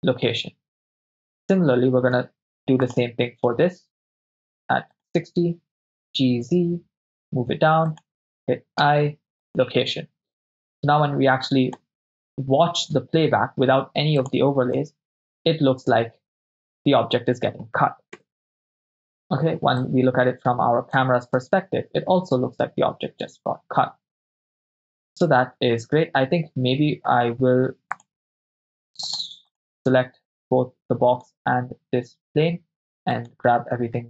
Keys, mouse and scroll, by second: 1.3 click, 1.3 right click, 2.2 i, 5.2 drag, 5.9 g, 6.4 z, 7.9-8.8 ctrl+drag, 8.8 i, 10.7-11.9 drag, 14.2 click, 14.9 shift+space, 18.3 KP_0, 20.0-21.0 drag, 21.5 shift+space, 24.9 shift+space, 27.9-29.1 drag, 31.3 shift+click, 31.3 shift+right click, 33.2 click, 33.2 right click.